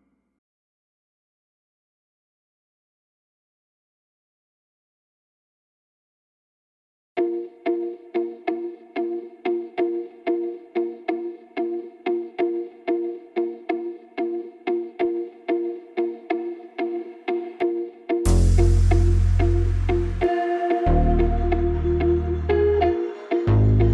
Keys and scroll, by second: 12.5 ctrl+8.